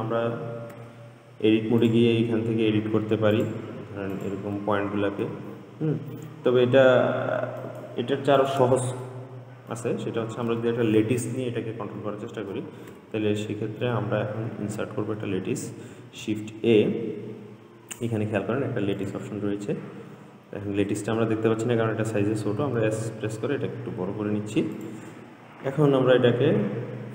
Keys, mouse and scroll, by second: 1.0 Tab, 2.1 click, 3.6 click, 4.4 click, 5.5 g, 8.6 click, 9.3-12.4 middle drag, 13.2 Tab, 13.7-16.2 middle drag, 16.2 shift+a, 22.9 s.